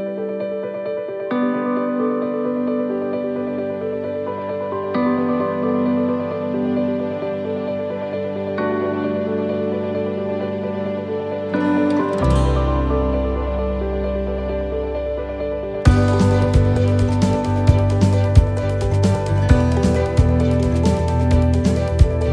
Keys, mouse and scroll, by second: 0.1-0.6 scroll up 1, 0.7 right click, 1.2 alt+shift+right click, 1.6 middle click, 2.7 e, 4.5 s, 13.8-14.4 scroll down 1, 15.4 ctrl+r, 17.8 ctrl+z, 19.5 click, 20.8 ctrl+r.